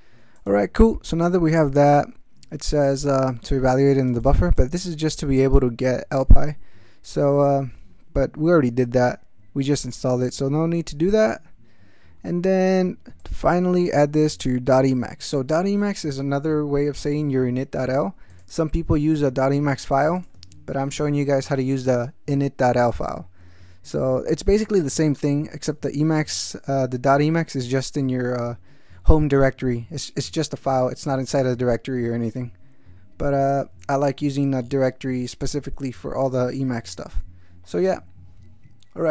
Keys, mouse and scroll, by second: 0.4 click, 0.7 scroll down 1, 3.1-4.5 drag, 4.6-5.7 drag, 7.4-8.4 scroll down 1, 8.4-8.7 scroll down 1, 9.2 scroll down 2, 9.8 scroll down 2, 10.0 middle click, 13.2-14.6 drag, 15.3-17.2 drag, 18.3 click, 18.9-20.1 drag, 20.3 click, 26.3-27.8 drag.